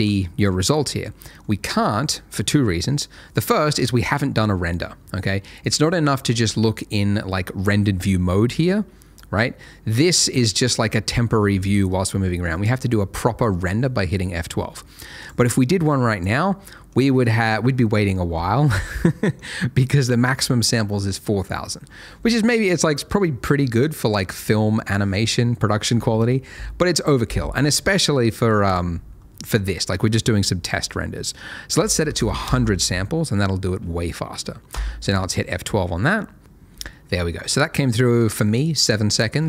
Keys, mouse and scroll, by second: 5.6 click, 8.6-9.5 scroll up 1, 10.5 middle click, 11.7 0, 15.2 click, 16.6 middle click, 28.7 click, 31.8 1, 32.0 0, 32.1 0, 32.4 Return, 34.7 F12.